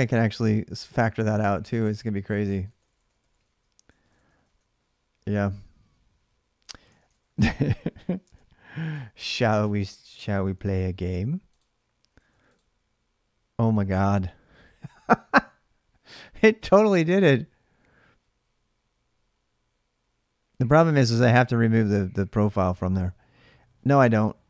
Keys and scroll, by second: 0.0-0.1 typing, 2.2-4.4 typing, 6.7 ctrl+[, 6.9 typing, 7.1 Return, 8.0 alt+Tab, 9.0 alt+Tab, 10.3 ctrl+r, 11.6-12.4 typing, 23.6 alt+Tab.